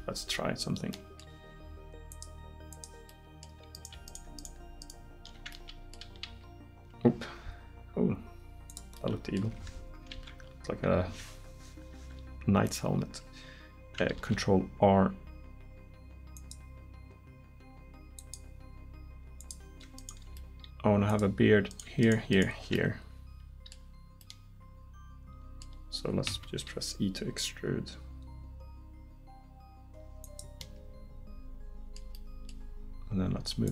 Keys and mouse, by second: 2.8 click, 3.1 middle click, 3.8-5.5 right drag, 6.3 r, 9.5 Escape, 10.2 ctrl+z, 14.2 ctrl+r, 19.4 click, 26.3 e.